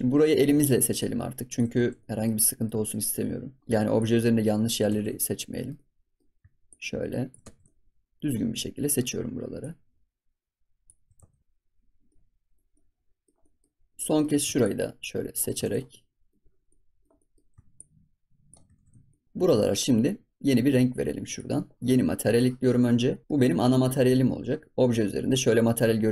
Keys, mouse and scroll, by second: 0.9 shift+click, 1.8 ctrl+s, 1.9-3.9 middle drag, 3.9 shift+click, 4.9 ctrl+s, 5.0-6.6 middle drag, 6.6 shift+click, 7.5 ctrl+s, 7.6-9.6 middle drag, 9.6-11.2 shift+drag, 11.2 ctrl+s, 11.6 scroll down 3, 12.0-13.7 middle drag, 13.7 scroll up 3, 13.9 middle click, 14.6-15.6 shift+drag, 15.6 ctrl+s, 15.7 scroll down 2, 15.9 middle click, 16.4 scroll up 4, 16.7-17.7 middle drag, 17.7 shift+click, 18.7 ctrl+s, 18.8 scroll down 6, 19.1 middle click, 21.2 click, 22.3-25.0 drag.